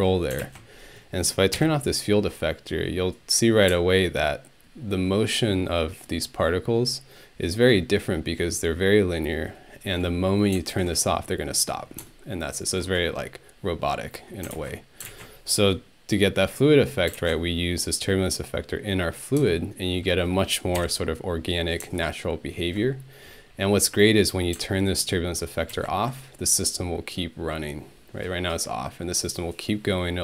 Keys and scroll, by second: 1.5 ctrl+Home, 20.8 Home.